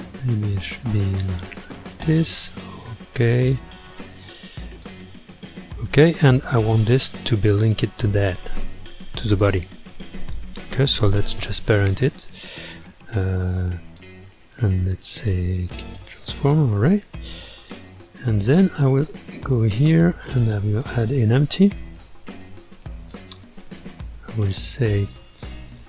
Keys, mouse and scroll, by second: 3.9-6.9 middle drag, 7.1 click, 8.0 shift+click, 9.4 scroll down 3, 9.9 scroll up 2, 11.1 ctrl+p, 16.6-18.7 middle drag, 18.7-19.7 scroll up 5, 19.7 shift+right click, 20.4 shift+a, 25.0 click.